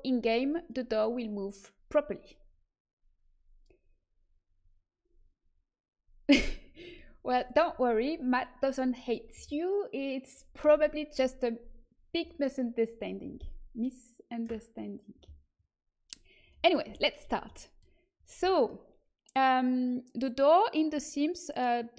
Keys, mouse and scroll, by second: 16.8 a, 17.2 Tab.